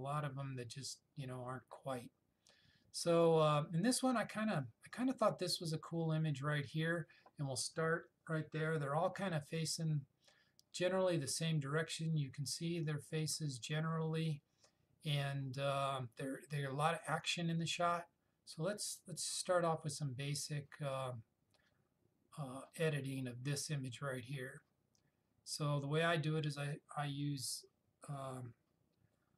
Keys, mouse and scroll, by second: 21.1 click.